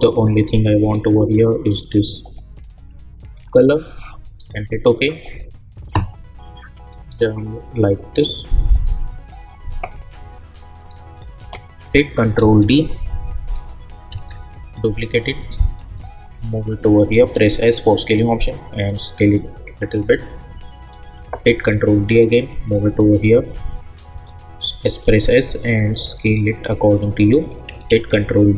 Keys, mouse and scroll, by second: 8.7 click, 12.4 ctrl+d, 13.5 click, 14.1 ctrl+d, 15.8 v, 16.3 click, 17.2 s, 18.1-21.4 drag, 21.4 ctrl+d, 21.8-24.1 drag, 24.1 s, 25.0-26.5 drag, 26.8 click, 27.8 ctrl+d.